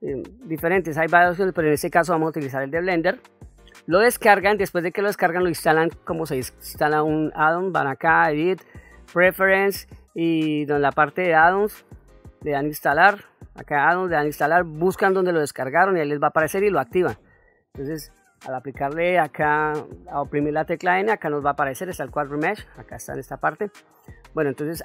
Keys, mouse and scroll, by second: 2.8 ctrl+middle click, 7.5-10.8 drag, 11.9-12.8 drag, 18.3 n.